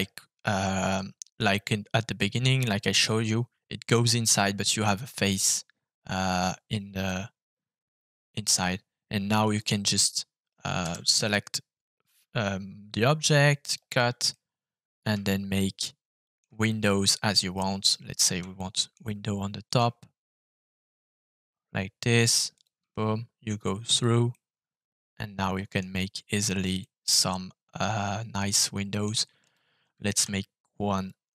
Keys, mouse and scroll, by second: 7.0-8.3 middle drag, 8.5 shift+middle click, 9.5 click, 10.8 f, 14.2 middle click, 14.9 middle click, 15.2-16.3 shift+middle drag, 16.6 middle click, 17.8 right click, 18.5 shift+middle click, 19.6 click, 22.5 shift+click, 23.9 click, 24.3-25.7 middle drag, 26.3 right click, 26.7-28.9 middle drag, 29.4 click, 30.1 f.